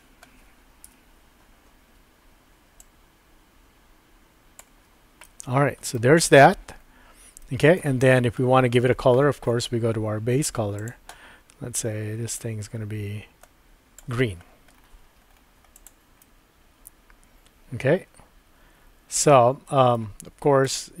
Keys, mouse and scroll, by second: 0.8 KP_1, 2.8-4.6 drag, 4.7-5.5 typing, 5.2 middle click, 7.4-7.8 shift+middle drag, 10.8 click, 16.2-20.0 middle drag.